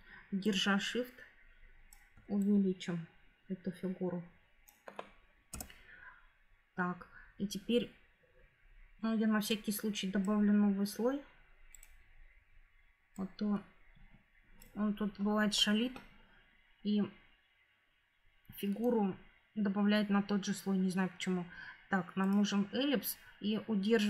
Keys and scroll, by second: 5.4 Return.